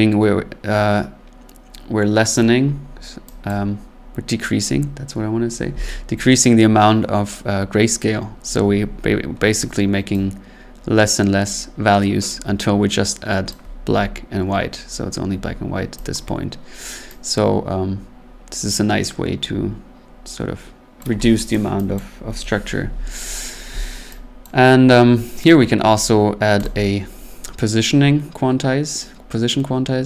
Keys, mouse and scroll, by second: 2.3 click, 2.7 scroll, 3.4 click, 3.9-4.4 scroll, 13.4 click, 13.9 scroll, 14.8 scroll, 16.1 click, 20.9 click, 21.5 click, 21.9 click, 24.4 click, 25.5 click, 26.6 click.